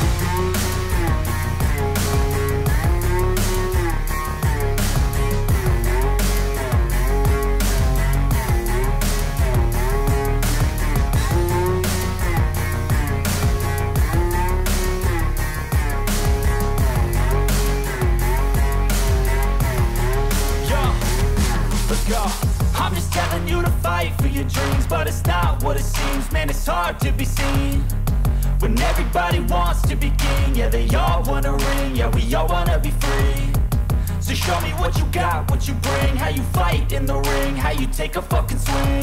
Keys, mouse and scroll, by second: 0.8 middle click, 2.0 click, 4.0 click, 4.7 click, 5.8 8, 6.4 Return, 7.0 middle click, 7.0 middle click, 9.0 typing, 9.2 click, 11.0 click, 11.6 click, 12.5-12.9 typing, 13.5 Return, 16.5 click, 17.8 click, 18.9 click, 21.4 click, 23.1 click, 24.6 click, 29.0 click, 31.6 click, 33.6 click, 33.9 middle click, 34.3 middle click, 36.1 click, 37.1-38.4 drag.